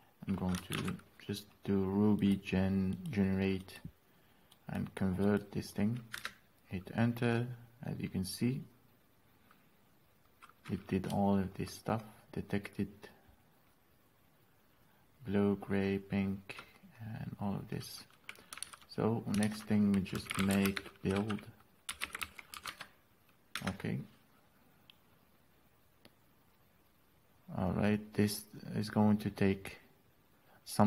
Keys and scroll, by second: 1.4 ctrl+v, 6.7 Return, 19.2 alt+Tab, 19.9 alt+Tab, 20.3-23.7 typing, 23.9 Return.